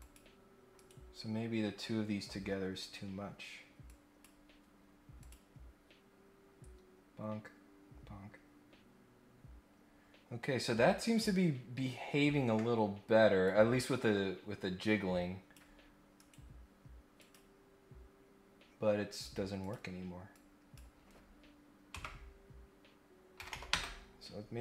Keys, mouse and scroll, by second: 0.0 click, 0.7 right click, 3.8 click, 5.2 click, 13.4-15.5 drag, 16.1 right click, 17.1 click, 19.1 click, 19.6 click, 20.3 click.